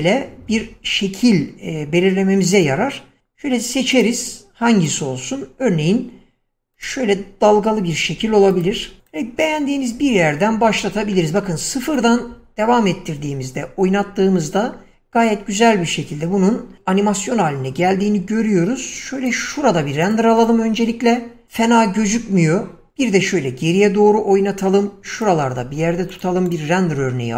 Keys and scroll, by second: 21.9 Escape.